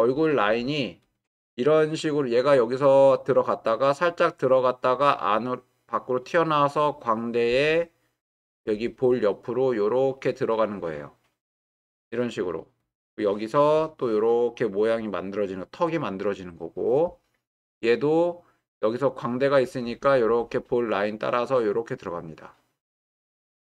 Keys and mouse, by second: 1.1 click, 13.8-15.6 drag, 17.8-23.7 drag.